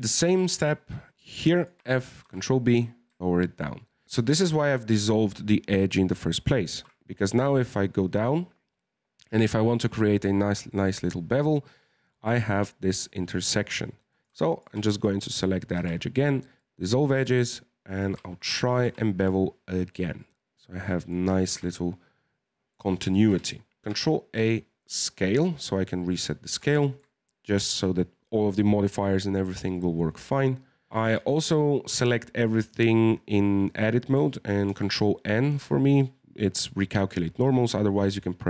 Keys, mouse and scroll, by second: 0.0 Tab, 0.4 shift+middle click, 0.6-1.2 scroll up 1, 1.2 right click, 1.5 alt+shift+right click, 1.8 f, 2.2 ctrl+b, 6.7 ctrl+b, 14.1 right click, 14.5 alt+shift+right click, 15.7 x, 17.1 right click, 17.8 alt+shift+right click, 18.8 ctrl+b, 21.5 Tab, 21.7-23.2 middle drag, 23.2 KP_1, 23.8-25.2 scroll up 3, 25.2-26.2 middle drag, 26.2 scroll down 2, 26.5 Tab, 26.8 shift+middle click, 27.2-30.3 scroll up 2, 30.9 a, 31.0 a, 34.6 ctrl+n.